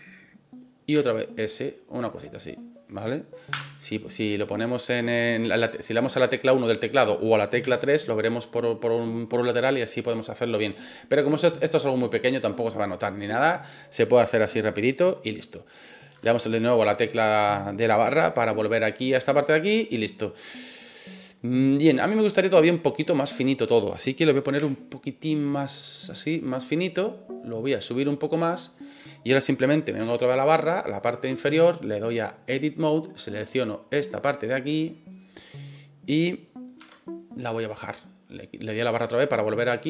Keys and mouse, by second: 0.9 s, 2.5 click, 3.5 KP_1, 7.6 KP_3, 12.1 click, 14.7-15.0 middle drag, 16.5 KP_Divide, 18.1-18.5 shift+middle drag, 18.8 right click, 19.5-21.2 middle drag, 22.6 right click, 24.6 s, 26.6 click, 27.5-28.7 drag, 30.0 KP_Divide, 30.5-31.1 middle drag, 32.0-32.5 drag, 33.6 right click, 35.1 click, 35.7 middle click, 37.5 middle click, 39.1 click.